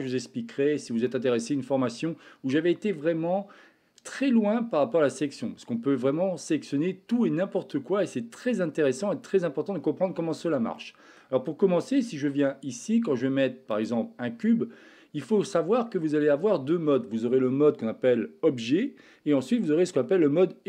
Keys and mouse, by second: 1.0-2.0 middle drag, 10.8 middle click, 12.2 shift+a, 15.4-16.1 middle drag.